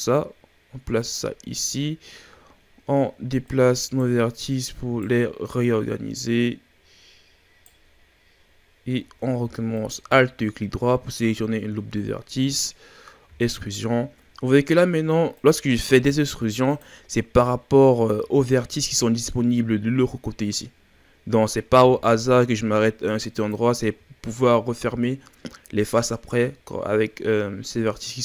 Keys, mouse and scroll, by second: 1.4-3.5 middle drag, 1.4-3.5 scroll up 2, 3.5 right click, 4.3 right click, 5.6 right click, 9.0-9.7 shift+scroll up 5, 9.7 alt+right click, 10.4 scroll down 1, 10.8-11.2 shift+scroll up 5, 11.5-12.1 ctrl+scroll down 2, 12.1 scroll up 1, 13.3 e, 15.8 r, 18.3-19.8 shift+scroll down 3, 20.8-21.7 scroll up 2, 21.7 g, 23.8-25.1 scroll down 4, 25.1-27.3 shift+scroll down 1.